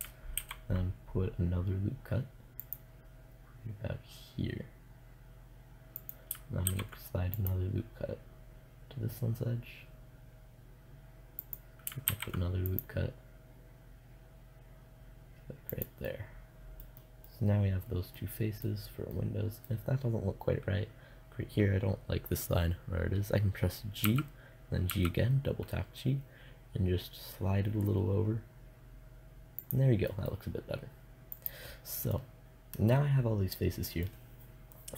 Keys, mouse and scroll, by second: 5.6-7.4 drag, 6.1 ctrl+r, 11.0-12.7 drag, 11.5 ctrl+r, 15.3 click, 15.5-16.8 middle drag, 16.8 click, 23.5 g, 29.2-31.7 drag, 31.7 middle click, 32.3 click, 32.5-33.5 middle drag.